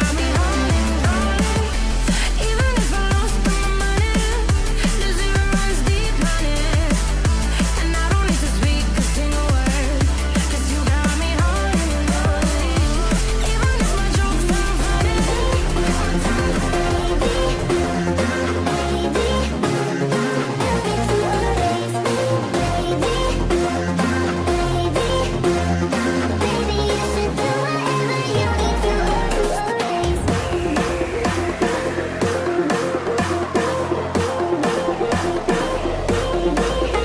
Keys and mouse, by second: 3.1 g, 4.4 KP_1, 11.1 click, 12.2 r, 13.1 g, 16.3 g, 17.5 g, 22.4 click, 23.8-30.6 drag, 30.9 g, 33.4 click, 34.6 g.